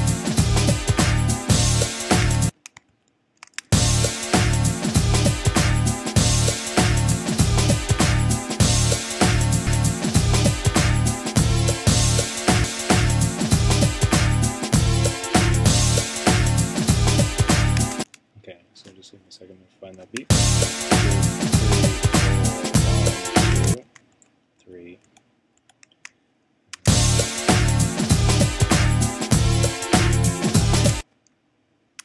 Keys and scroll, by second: 2.9 shift+Right, 7.2 shift+Right, 16.3 shift+Right, 24.1 shift+Right.